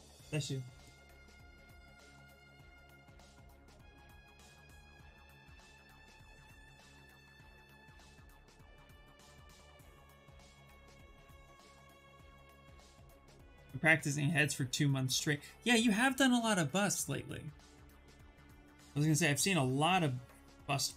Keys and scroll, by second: 2.0 s.